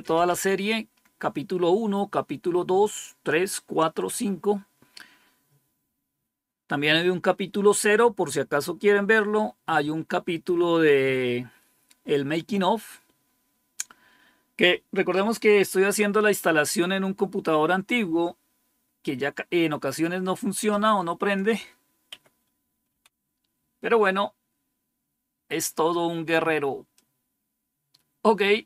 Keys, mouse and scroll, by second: 21.2 click, 22.0 Up, 22.8 Down, 24.7 scroll down 1, 26.9-28.6 drag.